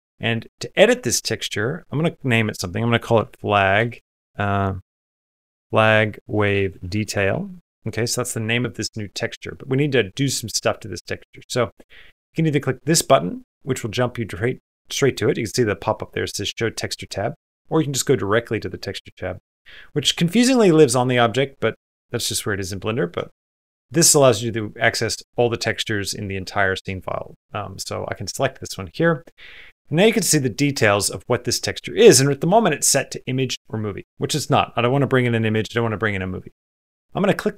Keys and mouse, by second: 1.8-7.4 drag, 3.8 BackSpace, 24.3 click, 24.9-27.9 drag, 36.6-37.5 drag.